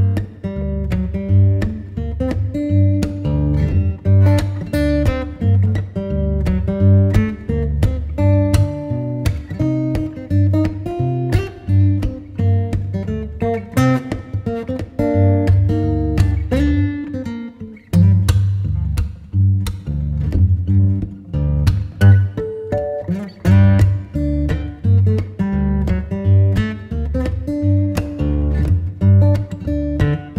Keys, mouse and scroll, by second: 0.3 Delete, 2.4 ctrl+s, 11.2 click, 14.8 Tab, 15.9 g, 18.3-21.4 right drag, 21.7 scroll up 5, 22.1 scroll down 4, 23.2 scroll down 4, 24.4 s, 26.3-30.3 middle drag.